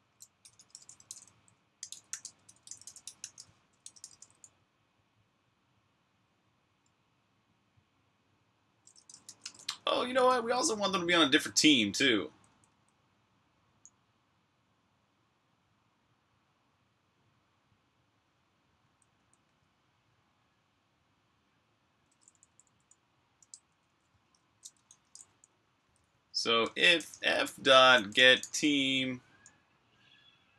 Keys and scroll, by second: 0.6-2.8 typing, 6.1 typing, 8.9 Escape, 9.2-10.2 typing, 12.0-12.7 typing, 18.4-19.8 typing, 22.0-29.0 typing.